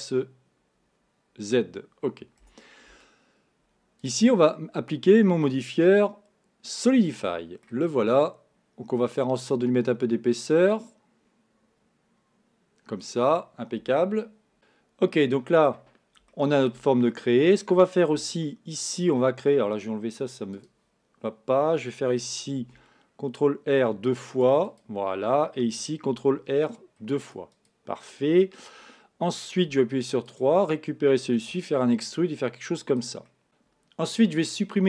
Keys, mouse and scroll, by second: 2.5 Tab, 4.1-7.1 drag, 7.3 middle click, 7.7-9.2 scroll down 1, 9.2-12.3 drag, 14.6-18.1 middle drag, 18.1 Tab, 18.5-20.6 middle drag, 20.6-22.6 drag, 22.6 ctrl+r, 26.1 ctrl+r, 29.7 3, 30.2 click, 31.4 e, 33.3 middle click, 33.4 z.